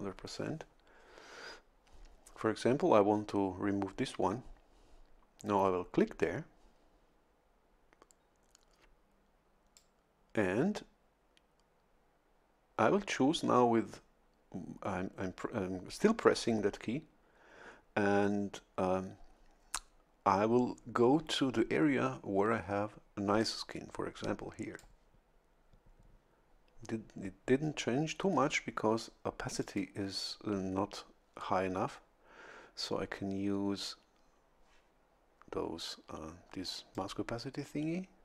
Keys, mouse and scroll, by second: 9.7-25.1 drag, 29.6 click, 36.9-38.2 drag.